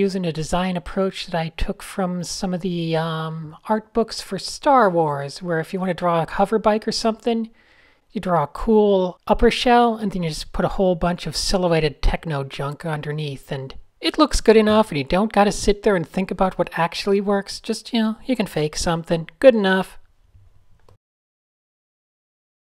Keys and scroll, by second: 0.1 Tab, 0.3 n, 1.4 super+z, 5.5 a, 6.8 fn+F2, 7.1 shift+super+a, 7.8 n, 8.0 Tab, 8.5 Tab, 9.6 super+z, 10.6 super+z, 11.4 super+z, 12.1 super+0, 13.4 super+z, 14.6 super+z, 16.3 super+z, 17.6 super+z, 17.7 super+z, 20.6-20.9 typing, 21.3 super+z, 22.2 super+space, 22.3-22.7 typing.